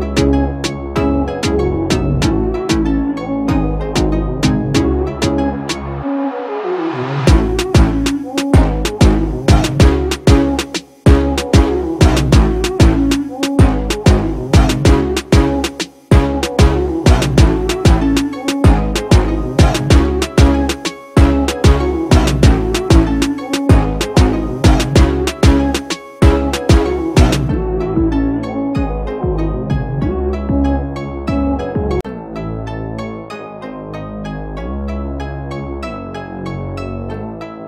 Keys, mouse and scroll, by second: 32.0 double click, 32.7 right click.